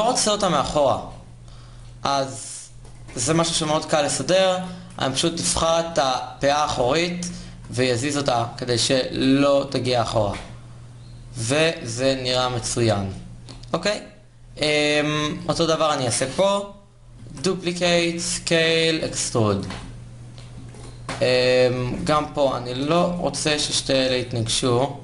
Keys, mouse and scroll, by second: 3.1 KP_1, 3.4 KP_3, 6.6 KP_3, 7.3 g, 9.6 Tab, 12.8-14.6 middle drag, 14.6 Tab, 16.9 shift+d, 17.7 s, 18.6 e, 19.3 Tab, 22.0 KP_3, 23.7 g.